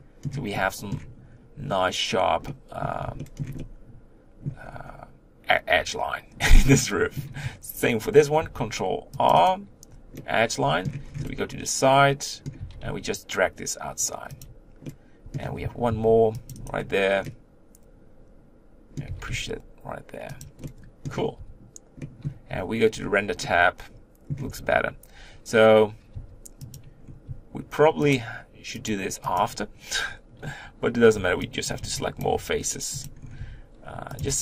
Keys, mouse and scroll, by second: 4.7-6.4 scroll up 2, 6.4 Tab, 6.6-8.4 middle drag, 8.4 ctrl+r, 10.2 middle click, 11.0 scroll down 2, 11.2-12.6 middle drag, 12.6 g, 14.8-15.9 middle drag, 15.9 ctrl+r, 17.2-19.1 middle drag, 19.1 g, 20.6 middle click, 21.4 Tab, 22.0 middle click, 22.9 z, 23.4-24.5 middle drag, 24.5 Tab, 26.2 3, 26.7 click, 27.0-28.1 scroll up 1, 28.1 shift+click, 28.9 shift+click, 29.3 shift+click, 31.7 b, 31.8 b, 32.3 g, 33.4-34.4 typing.